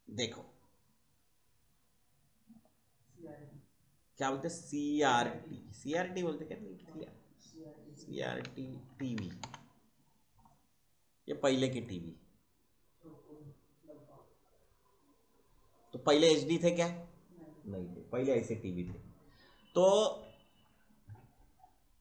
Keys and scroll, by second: 5.0 c, 5.7 r, 6.7 BackSpace, 7.8-9.6 typing.